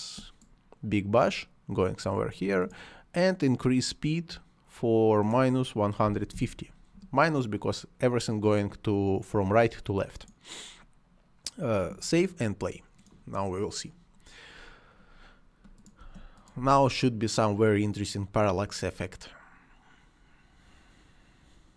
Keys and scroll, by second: 6.1 5, 6.3 Return, 16.0 space.